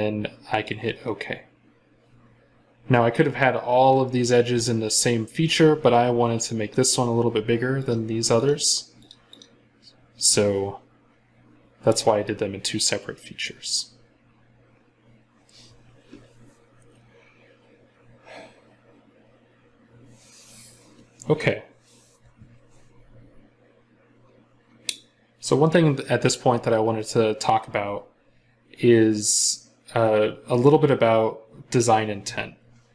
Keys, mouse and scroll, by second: 2.6-6.6 scroll down 1, 9.2 double click, 11.8 scroll up 1, 12.1 scroll down 1, 16.4-17.4 scroll down 1, 26.0 scroll down 1.